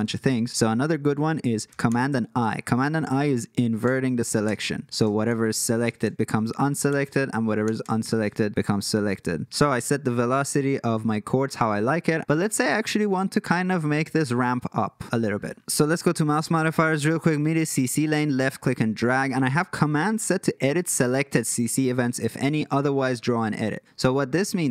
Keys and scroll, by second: 1.9 super+i, 3.8 super+i, 4.5 super+i, 5.0 super+i, 5.8 super+i, 6.9 super+i, 7.6 super+i.